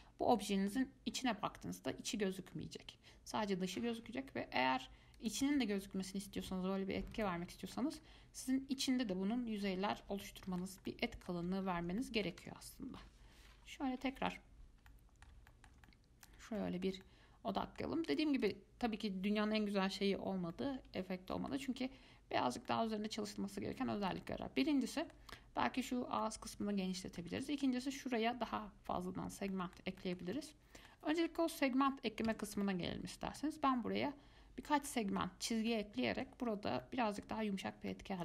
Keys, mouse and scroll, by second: 0.7 scroll down 2, 0.9-4.0 middle drag, 4.0-4.6 scroll down 1, 4.6-5.4 scroll down 1, 5.4-7.9 drag, 7.9-9.2 middle drag, 9.2-9.8 scroll up 6, 9.8 scroll down 7, 10.4-11.6 shift+middle drag, 11.6 scroll up 1, 11.8 shift+scroll down 5, 12.2 middle click, 12.6 Tab, 14.3 KP_Decimal, 15.1-18.3 middle drag, 18.3 click, 18.6 click, 20.7-25.9 middle drag, 26.4-32.5 middle drag, 32.5 Tab, 32.8-38.2 middle drag.